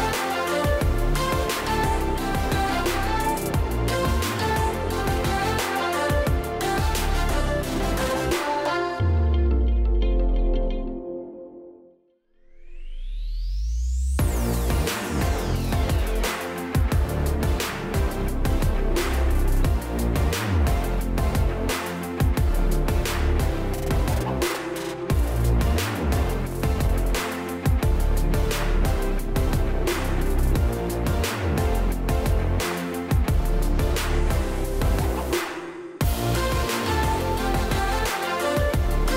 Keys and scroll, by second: 6.3 space, 11.9 space, 17.6 space, 25.5 space, 29.2-29.8 space.